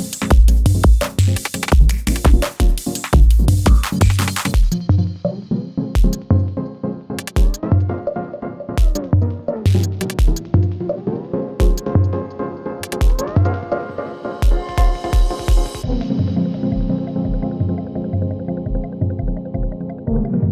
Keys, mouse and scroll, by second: 1.6 s, 2.2-4.7 drag, 9.0 ctrl+x, 10.0 click, 10.9 ctrl+v, 13.2 click, 14.6 right click, 15.8 click, 18.3 ctrl+y, 19.1 Return, 20.0-20.5 drag.